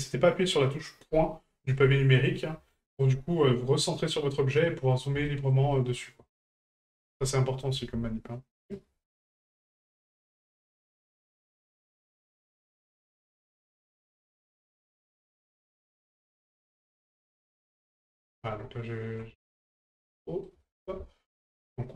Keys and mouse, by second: 2.7 middle drag, 4.1 middle drag, 4.9 middle drag, 5.3 shift+middle drag, 5.7 middle drag, 6.5 ctrl+right click, 6.8 middle drag, 7.2 shift+middle click, 8.6 ctrl+right click, 9.0 middle click, 9.9 shift+right click, 11.6 shift+right click, 11.9 middle click, 12.9 shift+middle click, 13.3 middle click, 14.4 middle click, 14.8 shift+middle drag, 15.5 middle click, 16.8 ctrl+right click, 17.2-17.7 middle drag, 19.5 ctrl+right click, 20.2 middle drag, 21.4 ctrl+right click, 21.8-21.9 middle drag.